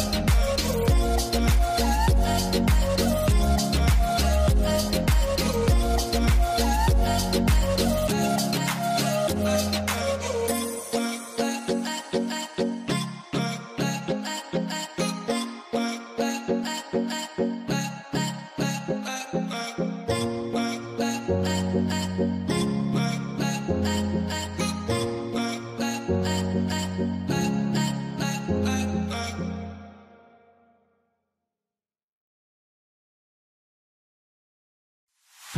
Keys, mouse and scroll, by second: 2.3 middle click, 3.7-4.2 scroll, 5.2 double click, 23.5 double click, 23.6 middle click, 24.3 double click, 26.1 double click, 26.2 middle click, 26.4 scroll down 1, 27.0 middle click, 27.4-28.0 scroll up 2, 27.8 middle click, 28.6 middle click, 28.9-30.5 scroll up 1, 31.0-32.5 scroll up 1.